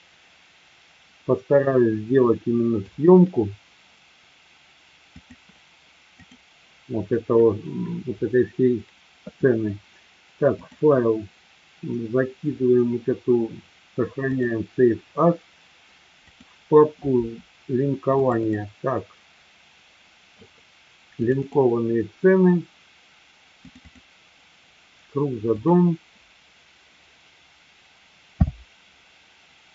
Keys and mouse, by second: 2.3-3.0 middle drag, 5.0 click, 6.2 click, 10.5-14.5 drag.